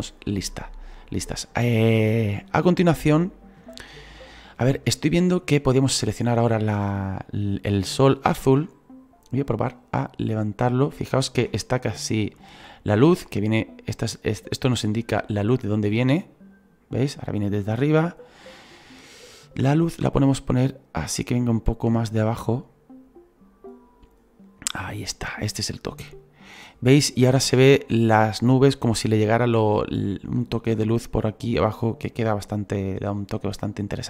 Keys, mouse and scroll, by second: 6.1-9.5 right drag, 9.5 click, 10.9-15.3 middle drag, 15.3-18.3 drag.